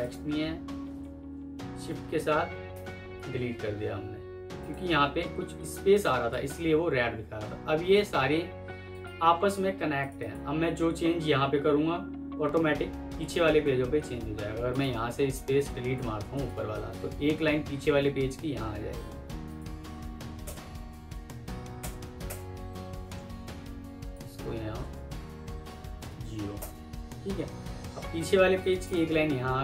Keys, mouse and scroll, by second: 1.1 shift+Page_Down, 2.6 Delete, 5.4 F2, 10.1 double click, 20.3 BackSpace, 21.7 BackSpace, 24.7 Insert, 25.9 typing, 26.5 Return, 28.8 double click.